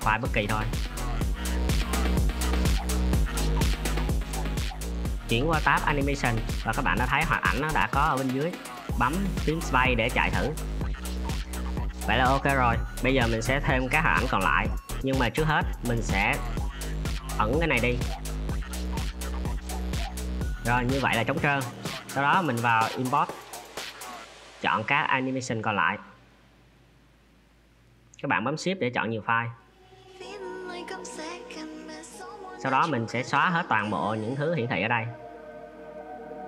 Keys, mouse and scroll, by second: 2.2 middle click, 3.2 space, 4.6 space.